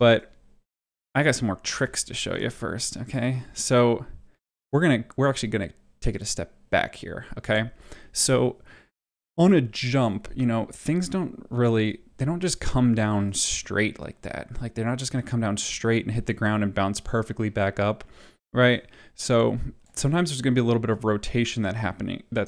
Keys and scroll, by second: 1.6 ctrl+z, 16.1 space.